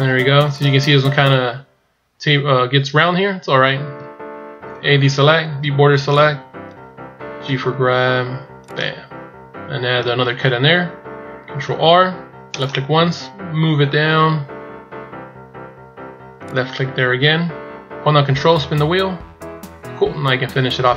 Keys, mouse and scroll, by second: 3.9-4.5 shift+scroll up 4, 4.8 a, 5.5 b, 7.4 g, 18.3-19.4 ctrl+scroll up 8.